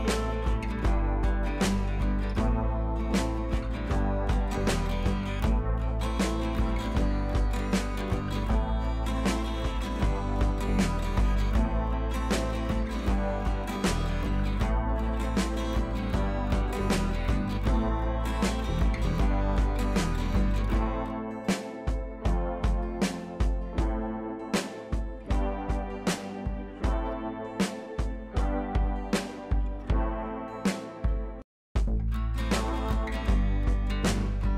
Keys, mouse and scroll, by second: 0.5 click, 5.0 ctrl+a, 6.0 ctrl+d, 8.0 click, 9.4 ctrl+v, 10.2-11.8 drag, 11.8 ctrl+t, 12.5-15.0 drag, 15.0 scroll up 1, 15.6 click, 16.8 scroll down 1, 17.6 click, 18.5 ctrl+t, 19.4-20.8 drag, 20.8 right click, 21.8-25.4 drag, 25.4 scroll down 1, 27.8-31.9 drag, 31.9 ctrl+t, 32.1 right click, 32.9-34.5 drag.